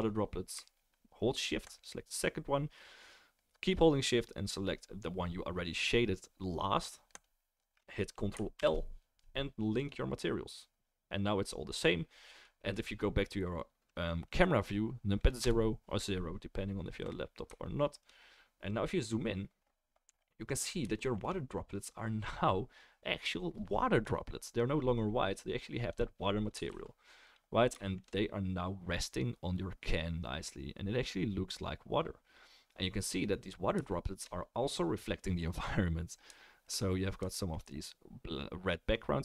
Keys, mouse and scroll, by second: 1.7 shift+middle click, 1.8 shift+right click, 7.1 shift+click, 9.8 ctrl+l, 10.2-16.8 right drag, 15.4 KP_0, 16.8-18.7 middle drag, 18.7-20.5 scroll up 1, 20.5-22.9 scroll up 1, 22.9-25.9 drag, 22.9-26.5 middle drag, 22.9-26.2 right drag, 26.5-32.5 ctrl+right drag, 26.7 ctrl+s, 27.2 click, 27.2 middle click, 30.0-39.2 middle drag.